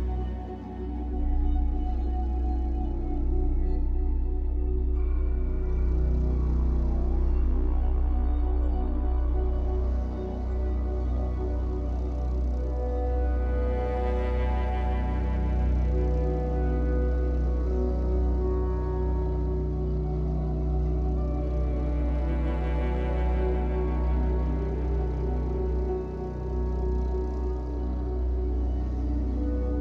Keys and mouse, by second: 0.0-0.3 typing, 0.3 click, 3.2 Escape, 3.8 click, 4.5-6.3 drag, 8.0 click, 9.2-10.1 typing, 10.7 click, 12.1 click, 12.4 space, 14.3 space, 15.2-16.4 alt+drag, 16.5 typing, 16.7 ctrl+alt+click, 17.1 alt+click, 19.1 space, 20.4 space, 21.3-23.6 alt+drag, 24.0 ctrl+alt+click, 24.5-26.2 alt+drag, 24.5 typing, 26.0-27.4 typing, 27.3-29.8 drag.